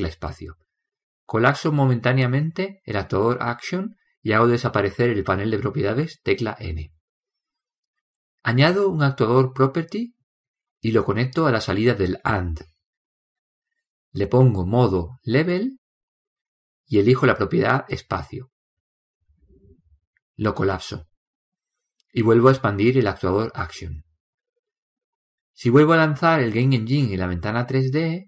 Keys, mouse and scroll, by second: 22.6-26.0 drag.